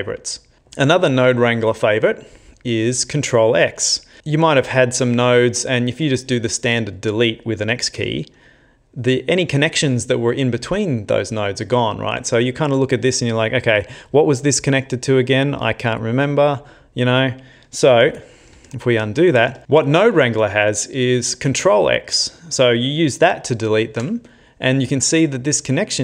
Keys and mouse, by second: 4.2 ctrl+middle click, 6.0 click, 8.0 x, 12.8 click, 18.1 ctrl+z, 18.6 ctrl+z, 19.1 ctrl+z, 19.6 click, 23.9 ctrl+x.